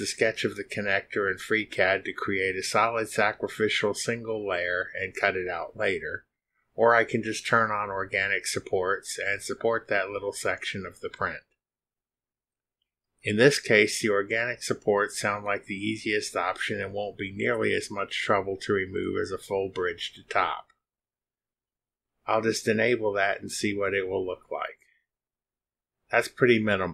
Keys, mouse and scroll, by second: 4.8 click, 7.3 click, 12.1 click, 12.9 click, 15.3 click, 16.8 click, 20.5 click, 24.4-25.4 drag, 26.6-26.9 drag.